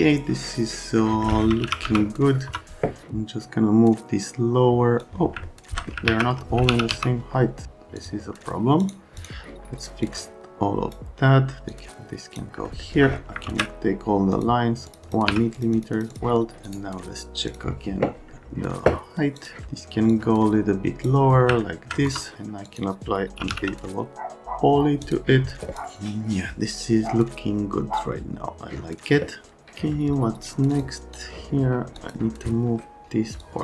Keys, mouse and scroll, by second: 1.0 right click, 1.4-2.4 typing, 2.5 F3, 4.2 middle click, 5.0 click, 5.0 right click, 5.4 alt+middle click, 6.1 alt+q, 6.4-7.4 typing, 8.0 click, 8.8 click, 9.1 click, 10.0 click, 11.7 click, 12.7 right click, 13.5 ctrl+a, 14.3 click, 14.9 click, 15.1 click, 15.2 1, 15.6-16.1 scroll up 4, 16.7 right click, 17.5 click, 19.4 click, 20.1 click, 21.0 right click, 21.6 alt+middle click, 22.0 F3, 22.6 F12, 23.1-24.0 typing, 25.0 F12, 25.7 click, 30.7 click, 31.1 click, 32.0 click, 33.4 click.